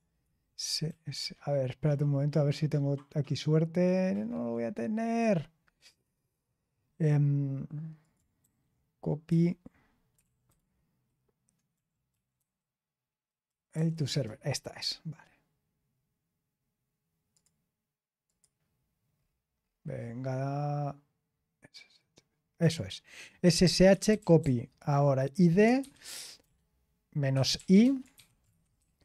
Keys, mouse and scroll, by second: 0.8 BackSpace, 2.4 scroll down 1, 3.3-3.7 scroll down 1, 8.0 ctrl+click, 8.4 BackSpace, 9.8-10.6 typing, 13.4 ctrl+t, 13.8-14.5 typing, 17.3 click, 18.2 click, 19.1-22.5 scroll down 3, 22.5 scroll down 1, 22.7 click, 23.1 click, 23.3-28.7 typing.